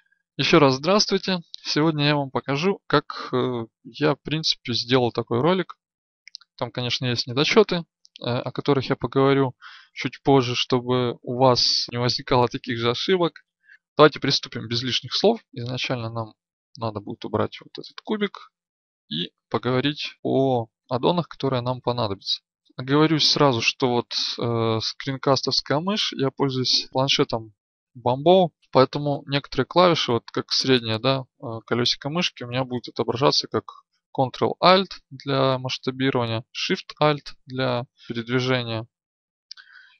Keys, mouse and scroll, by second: 15.4 KP_1, 16.9 KP_5, 18.0 x.